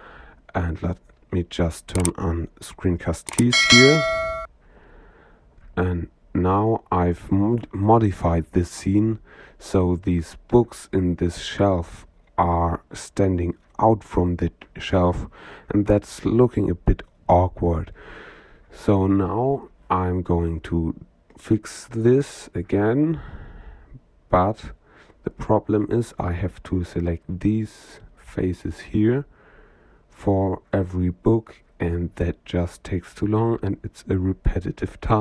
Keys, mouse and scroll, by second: 1.8-4.2 drag, 5.2 middle click, 5.9 n, 6.7-8.2 middle drag, 10.8-11.9 middle drag, 13.5 click, 14.3-19.4 middle drag, 20.2 Tab, 20.8 middle click, 22.8 shift+click, 22.9 shift+middle click, 23.1 shift+click, 23.1 shift+middle click, 28.4 shift+click, 29.2 shift+click, 29.8 shift+click, 30.5 shift+click, 31.3 shift+click, 32.1 middle click, 32.5 click, 33.2-35.2 middle drag.